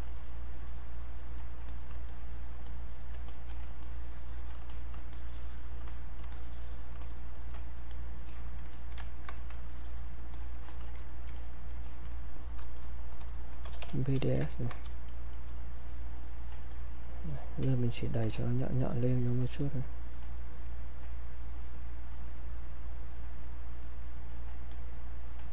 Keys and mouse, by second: 0.0 shift+click, 1.7 click, 2.1 shift+click, 2.7 shift+click, 3.5 click, 3.8 shift+click, 4.6 click, 5.1 shift+click, 6.3 shift+click, 7.0 click, 8.7 alt+click, 9.1 ctrl+right click, 9.4 click, 9.7 shift+click, 11.4 click, 12.8 shift+click, 13.4-15.4 typing, 14.2 alt+click, 14.5 ctrl+right click, 15.3 click, 15.8 click, 17.7 space, 18.1 click, 18.2 space, 18.4 click, 23.1 click.